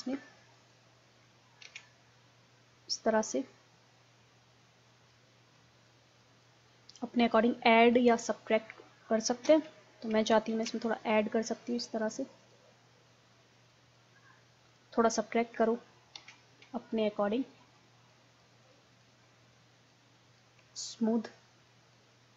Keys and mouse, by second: 0.0 middle click, 1.0 middle click, 1.7 ctrl+z, 3.5-4.9 middle drag, 4.9 click, 5.2 click, 5.2-6.4 middle drag, 6.4-8.5 drag, 9.5 ctrl+z, 10.6 ctrl+z, 16.2 ctrl+z, 19.4-22.3 drag.